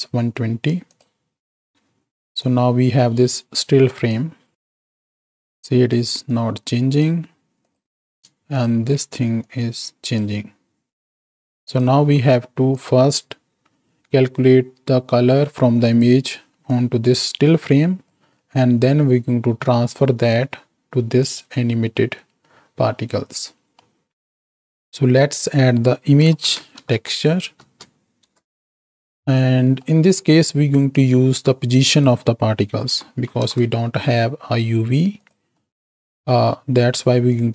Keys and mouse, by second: 0.8 click, 2.6-3.5 drag, 4.0 click, 5.4 click, 6.3 click, 7.6 click, 8.5 ctrl+shift+click, 9.4 click, 11.6 click, 12.0 x, 12.8-16.1 drag, 16.7-18.2 drag, 21.2 click, 23.7-24.1 middle drag, 24.5 shift+a, 27.7 Down, 29.3 middle click, 30.8-35.3 drag, 35.6 middle click, 37.3-37.5 drag.